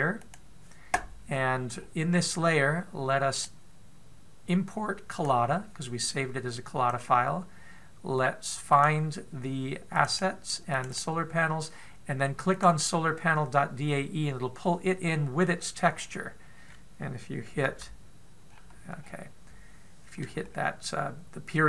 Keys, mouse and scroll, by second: 0.9 click, 1.8-3.3 scroll down 14, 3.9 click, 15.2 click, 16.1-16.7 scroll up 8, 18.2 KP_Decimal, 19.0-19.6 scroll up 1, 19.6 scroll down 1, 19.8 scroll down 2, 21.1 middle click.